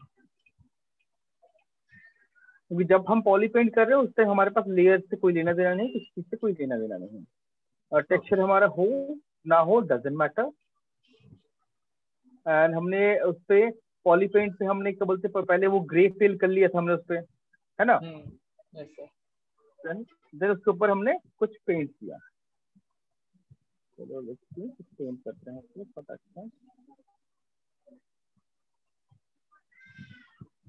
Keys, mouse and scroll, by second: 6.3 click, 7.3 click, 8.6 click, 11.7 click, 12.7 click, 16.2 alt+click, 16.9 right click, 20.4 click, 22.5 click, 24.3 click, 25.7 click, 26.6 click, 27.5 alt+click, 28.9 click, 30.1 click.